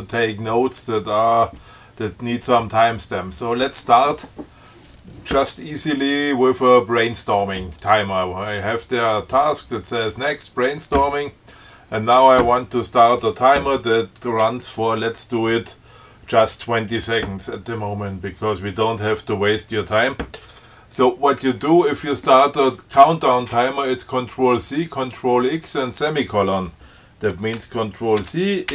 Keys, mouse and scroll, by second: 8.1 click, 28.5 ctrl+c.